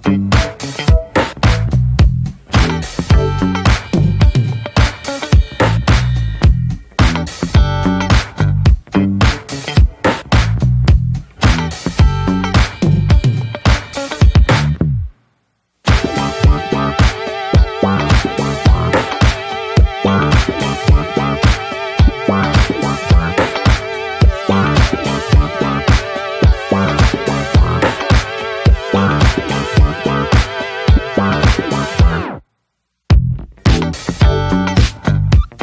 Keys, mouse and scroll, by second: 0.5 scroll up 1, 0.7 shift+middle click, 1.0-1.4 scroll up 1, 1.4 click, 1.7 shift+middle click, 2.1 scroll up 1, 2.2 shift+middle click, 2.5 scroll down 1, 2.7 shift+middle click, 3.1 scroll down 2, 3.3 shift+middle click, 3.5-4.1 scroll up 2, 3.6 shift+middle click, 4.1 click, 4.5 scroll down 3, 4.7 middle click, 4.9 `, 5.2 shift+middle click, 5.9 click, 6.2 scroll down 2, 6.3 shift+middle click, 6.6 shift+scroll up 1, 6.7 middle click, 7.0 click, 7.3 middle click, 7.6 click, 8.0 scroll down 1, 8.0 middle click, 8.4 click, 8.9 middle click, 9.4 click, 9.7 scroll down 1, 9.8 middle click, 9.9 scroll up 1, 10.0 click, 10.4 middle click, 10.5 scroll up 1, 10.7 click, 11.1 middle click, 11.4 click, 11.8 middle click, 12.2 click, 12.6 ctrl+z, 12.7-15.0 shift+drag, 15.0 ctrl+z, 15.2 click, 15.8 ctrl+z, 15.9 middle click, 16.3 shift+click, 16.7 scroll down 1, 16.8 middle click, 16.9 scroll up 1, 17.1 shift+middle click, 17.5 scroll up 1, 17.7 click, 18.2 middle click, 18.4 click, 19.0 middle click, 19.3 click, 19.7 middle click, 19.9 shift+click, 20.2 shift+middle click, 20.5 click, 21.0 middle click, 21.2 click, 21.6 shift+middle click, 22.0 click, 22.4 middle click, 22.8 click, 23.3 shift+middle click, 23.7 click, 24.0 middle click, 24.3 click, 24.7 middle click, 25.3 scroll up 2, 25.4 click, 26.0 middle click, 26.4 click, 26.7 shift+middle click, 27.5 click, 28.1 middle click, 28.4 click, 29.2 middle click, 30.0 click, 30.7 scroll down 2, 30.8 middle click, 31.2 click, 31.9 middle click, 32.0-32.4 scroll up 2, 32.1 shift+middle click, 32.4 middle click, 32.8 click, 33.6 middle click, 33.8 click, 34.4 scroll down 2, 34.7 shift+middle click, 34.9 click, 35.2 scroll down 1, 35.4 shift+middle click.